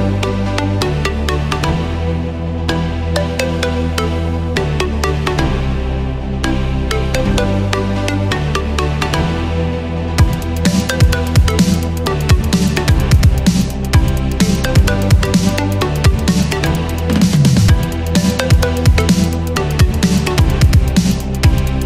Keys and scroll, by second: 4.1 super+z, 13.6 super+z.